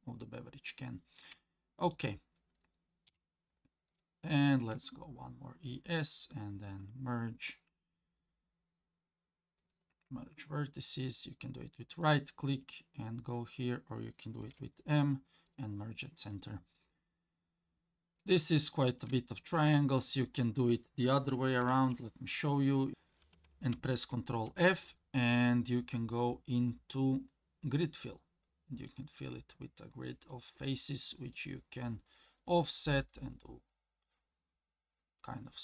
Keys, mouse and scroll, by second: 1.5 shift+middle click, 3.1 KP_7, 3.8 scroll up 2, 4.5-6.1 scroll up 1, 4.5 e, 6.7-14.5 right drag, 14.5 m, 16.3 middle click, 17.5 scroll up 2, 18.2 middle click, 19.2 shift+middle click, 19.8 middle click, 21.6 ctrl+z, 22.9-30.3 middle drag, 24.5 ctrl+f, 31.3 click, 32.4 click, 33.0 click, 35.2 click.